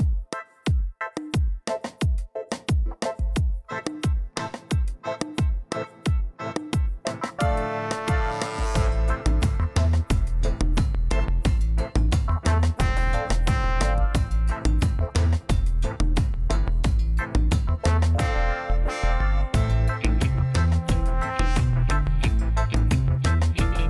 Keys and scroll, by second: 1.7-4.6 typing, 4.9 Return, 6.8 1, 7.0 Return, 9.1 ., 9.3 2, 9.6 Return, 19.1 g, 19.4 l, 19.6 d, 20.2 Return, 22.5 e, 23.1 a, 23.4 7.